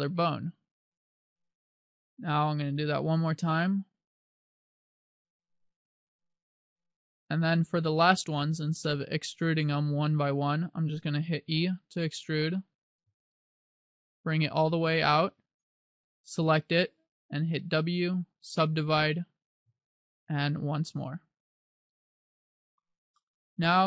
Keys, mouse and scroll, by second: 0.7 click, 3.0 e, 7.6 click, 11.4 e, 15.8 click, 16.5 right click, 17.7 w, 19.8 w, 23.3 middle click.